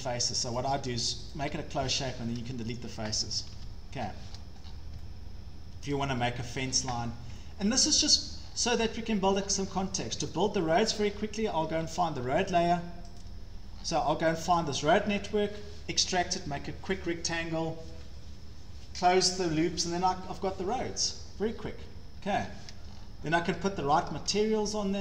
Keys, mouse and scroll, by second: 0.0 click, 2.0 Delete, 2.0-5.9 click, 2.2 scroll, 3.6 ctrl+z, 4.0-4.8 scroll, 5.9-6.6 shift+scroll up 4, 6.7 scroll down 4, 7.2 scroll, 7.3-7.8 scroll up 8, 8.2-10.2 shift+scroll, 8.3 shift+click, 8.4 click, 10.9-11.4 scroll, 12.2 Escape, 12.6 click, 12.7 click, 13.2 click, 13.8 scroll, 14.4 scroll down 12, 21.5 scroll, 21.7 scroll up 7, 22.0 Escape, 22.2 Escape, 22.4 Escape, 22.4 scroll down 6, 22.9 scroll up 3.